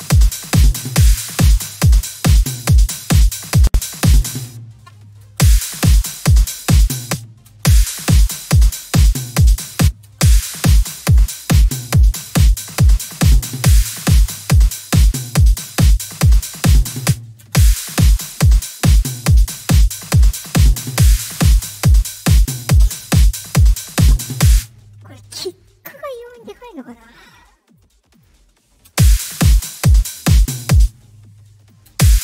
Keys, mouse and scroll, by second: 0.0-1.2 drag, 2.0-3.8 drag, 4.2 space, 5.2 space, 6.9 space, 7.4 space, 8.4-9.5 drag, 9.7 space, 10.0 space, 10.4-12.6 drag, 15.5 click, 16.9 space, 17.4 space, 21.0-22.5 drag, 24.4 space, 27.6 click, 28.1 click, 28.8 space, 29.6 click, 30.7 space, 31.5 click, 31.8 space.